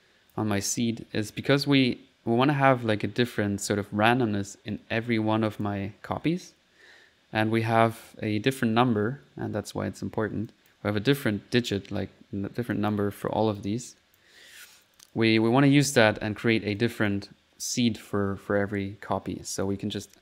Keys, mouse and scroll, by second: 1.5 click, 5.5 click, 6.1 click, 6.5-8.3 middle drag, 10.5 click, 12.7 click, 13.6 click, 14.5 click, 15.4 middle click, 16.8 click, 19.6 click.